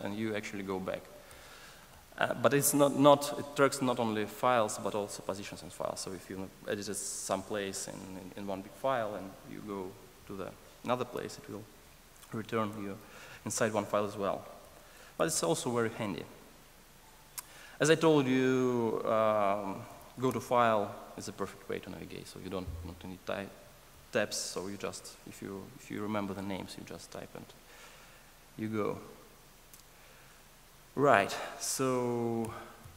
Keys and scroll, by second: 1.8 alt+super+], 14.5 alt+super+[, 15.1 alt+super+], 20.2 ctrl+shift+super+o.